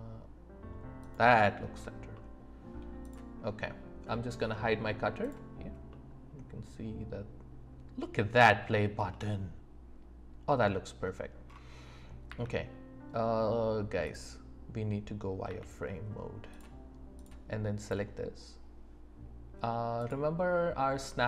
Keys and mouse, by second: 1.0 click, 2.1-2.7 middle drag, 5.2 click, 5.9-7.3 middle drag, 7.4 middle click, 7.9 click, 7.9 middle click, 10.2 middle click, 12.3 z, 15.4 z, 20.1-21.2 drag.